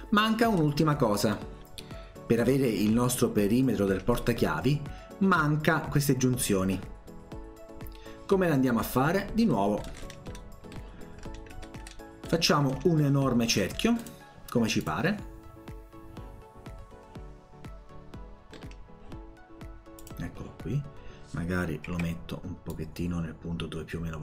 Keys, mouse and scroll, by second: 0.2 scroll down 1, 0.5 scroll up 2, 1.3 middle click, 9.2 scroll up 2, 9.4-10.0 scroll down 4, 10.0-10.5 scroll up 2, 10.7 middle click, 11.2-11.6 scroll up 1, 11.8 scroll up 1, 12.3 middle click, 14.0 click, 14.8 click, 18.6 middle click, 20.0 click, 21.9 Escape, 22.7-24.2 drag.